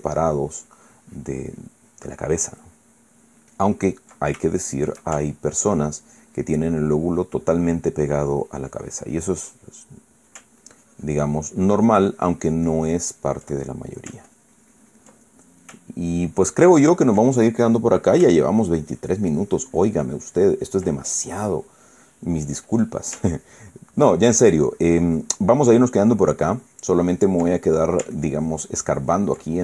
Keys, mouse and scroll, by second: 5.2 ctrl+shift+middle click, 5.9-10.3 ctrl+shift+drag, 10.3 ctrl+middle click, 11.3-14.2 ctrl+drag, 14.3 ctrl+middle click, 15.0 ctrl+click, 15.9 ctrl+middle click, 16.8-18.0 ctrl+drag, 18.1 ctrl+middle click, 19.2-21.6 ctrl+drag, 22.3 middle click, 23.4 middle click, 24.0-28.2 ctrl+drag, 28.2 ctrl+middle click, 28.9-29.6 ctrl+drag.